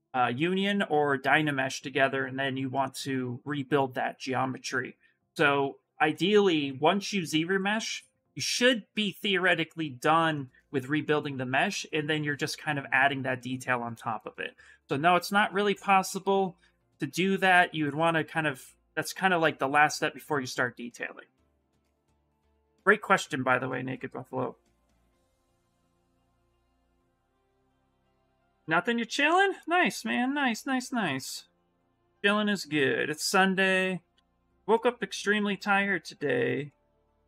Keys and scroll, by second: 23.2 s, 30.7 2, 33.9 s.